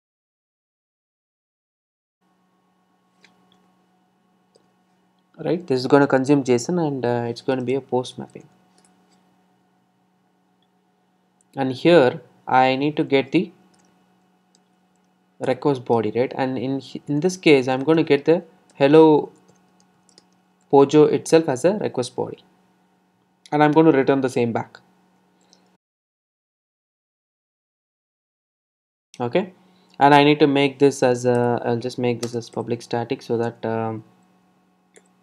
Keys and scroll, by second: 4.5 Return, 8.9 Return, 15.6 Return, 21.4 Return, 27.5 Return.